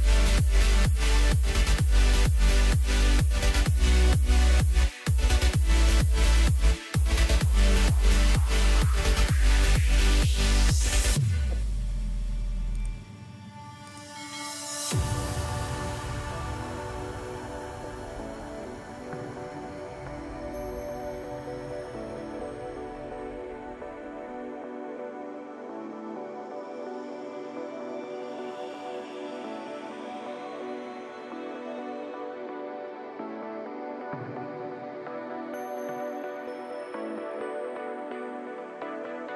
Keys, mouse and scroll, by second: 0.1 middle click, 1.0-1.6 scroll up 1, 1.6-2.1 scroll up 1, 2.6 click, 3.5-5.5 drag, 5.5-6.2 scroll down 7, 7.1-9.3 drag, 9.3-10.7 scroll up 7, 10.7-13.1 drag, 17.5-18.1 scroll up 1, 18.1-20.6 middle drag, 20.6 ctrl+r, 22.9 s, 26.2-28.6 middle drag, 28.6 3, 29.0 click, 30.7 drag, 31.5 click, 32.4-33.9 middle drag, 33.9 scroll up 2, 34.5-35.9 middle drag, 35.9 ctrl+r.